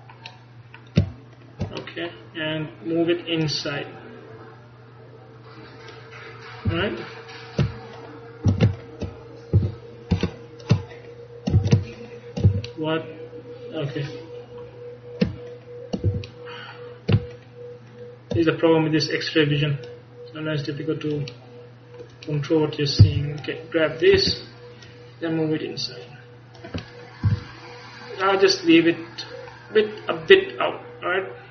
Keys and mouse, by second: 3.5-5.2 drag, 6.7 a, 8.0-9.7 right drag, 8.6 shift+a, 11.0-14.4 middle drag, 11.7 a, 12.5 a, 14.8 middle click, 16.4 a, 19.9-21.2 middle drag, 21.4 middle click, 22.4 middle click, 23.1-24.4 middle drag, 23.1 c, 24.9-26.6 drag, 26.9 middle click, 27.3 z, 30.3 middle click, 30.4 click.